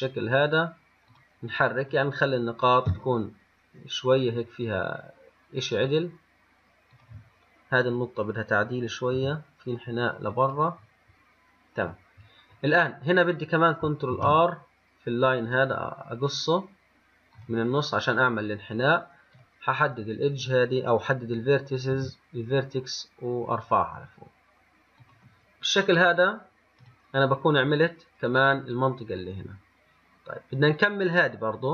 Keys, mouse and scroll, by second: 2.1 click, 3.1 g, 8.1 click, 9.4 g, 11.4 scroll down 2, 12.1 scroll up 1, 14.4 ctrl+r, 19.6 click, 20.2 click, 22.2 g, 27.1 click.